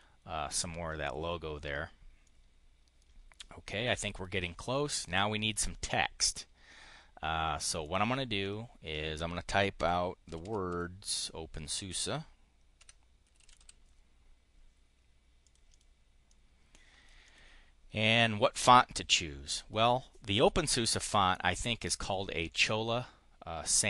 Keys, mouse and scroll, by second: 3.7 click, 5.2 click, 7.7 click, 8.2 click, 9.9-11.4 typing, 12.9-14.0 typing, 15.3 click, 15.6 click, 16.1 click, 17.9 click.